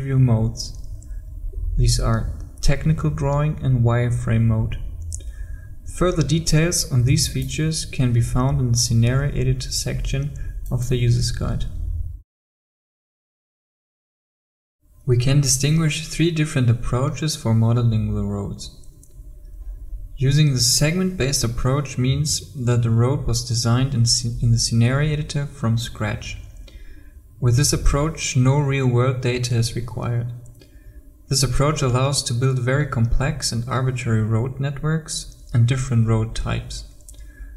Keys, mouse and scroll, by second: 7.3 click.